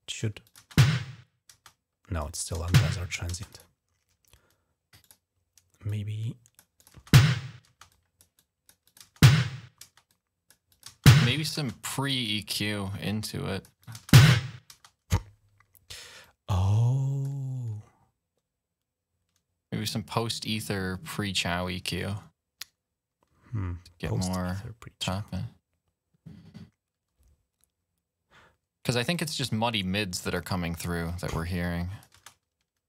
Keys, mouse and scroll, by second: 0.2 click, 1.4 click, 2.2 click, 3.3 click, 4.8 click, 5.7 click, 6.6 click, 7.7 click, 8.1 click, 8.6 click, 8.6 typing, 9.6-10.4 typing, 9.9 click, 10.5 click, 11.8 click, 12.8 click, 13.6 click, 16.0-17.0 drag, 24.9 right click, 28.9 click, 29.9 click, 30.0 click, 31.1 click, 31.9 space.